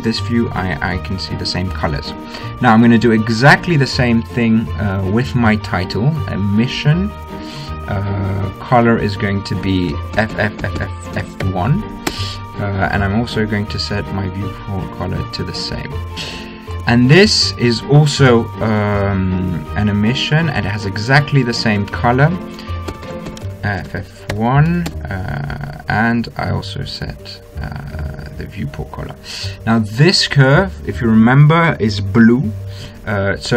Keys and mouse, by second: 4.0-8.4 drag, 10.9 f, 11.3 f, 13.9-15.8 drag, 17.3-19.1 right drag, 19.1 click, 21.7-23.7 drag, 23.7 f, 24.0 f, 27.0-28.9 drag, 28.9-31.1 middle drag, 31.1-32.8 drag, 32.8 middle click.